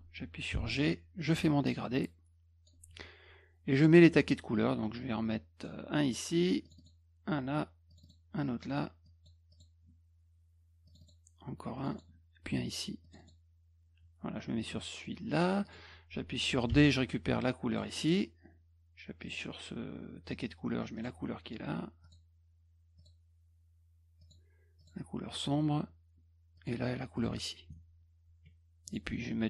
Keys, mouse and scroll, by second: 1.3-2.7 drag, 5.3 click, 6.6 click, 6.8 click, 7.9 click, 8.0 click, 9.0 click, 9.5 click, 10.9 click, 11.0 click, 11.8 click, 11.9 click, 13.0 click, 13.2 click, 15.6 click, 16.7 d, 17.7 click, 19.2 click, 21.0 click, 22.0 click, 23.0 click, 24.2 click, 24.8 click, 26.6 click, 27.2 click, 28.9 click.